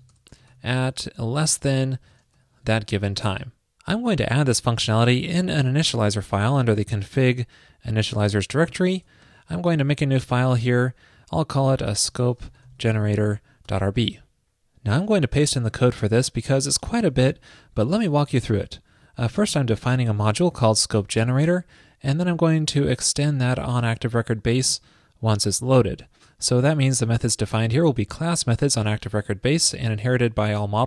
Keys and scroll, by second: 17.3 super+v.